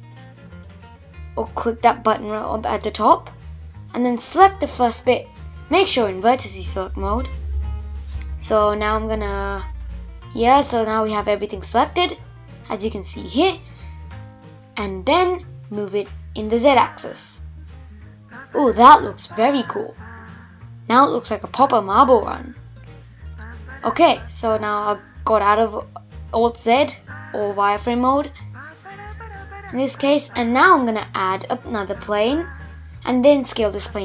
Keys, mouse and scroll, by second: 1.5 click, 3.8 click, 7.4-10.4 middle drag, 11.3 click, 12.9 g, 15.1-18.1 middle drag, 19.9 Tab, 20.4-21.7 middle drag, 21.7 alt+z, 22.2 scroll down 1, 22.3-28.3 middle drag, 28.3 shift+a, 30.8 s, 32.2-34.0 middle drag.